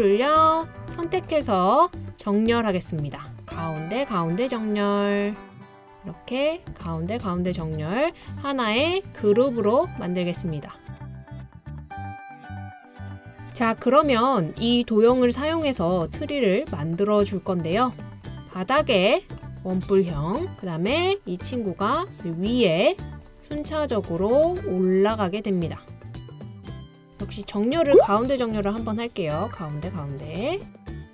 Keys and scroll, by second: 28.2-29.9 typing.